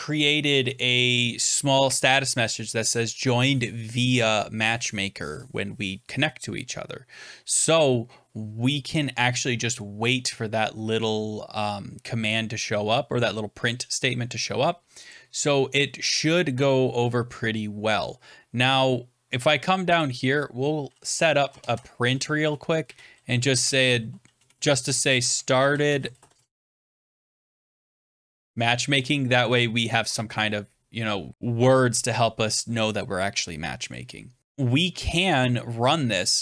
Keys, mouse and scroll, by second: 15.0 click, 16.7 scroll down 3, 18.2-18.9 scroll up 9, 19.1 scroll down 2, 19.9 click, 20.0 scroll down 7, 21.0-28.6 typing, 22.6 middle click, 29.3 ctrl+s, 29.8 m, 33.8 click.